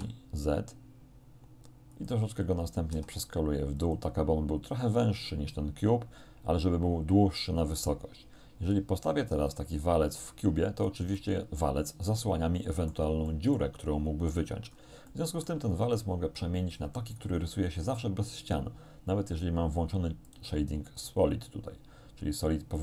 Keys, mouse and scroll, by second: 2.0 click, 3.0 s, 3.8 click, 9.5-11.1 drag, 11.1 scroll down 1, 11.2-13.2 middle drag, 13.3 middle click, 14.8 scroll up 1, 15.2 shift+middle click, 20.3 click.